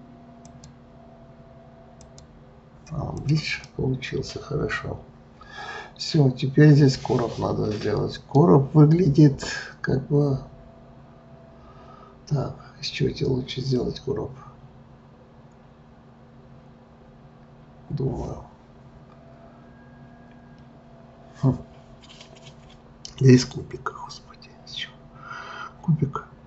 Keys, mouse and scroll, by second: 0.5-3.3 drag, 3.6-6.7 middle drag.